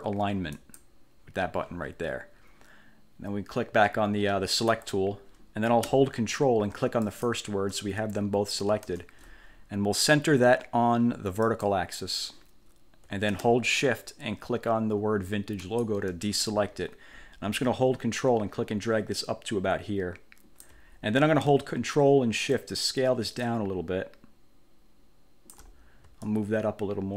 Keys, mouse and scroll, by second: 0.7 click, 4.6 click, 7.2 shift+click, 9.0 Caps_Lock, 11.6 click, 15.7 shift+click, 18.2-21.0 ctrl+drag, 22.7-25.9 ctrl+shift+drag, 26.4-27.1 ctrl+drag.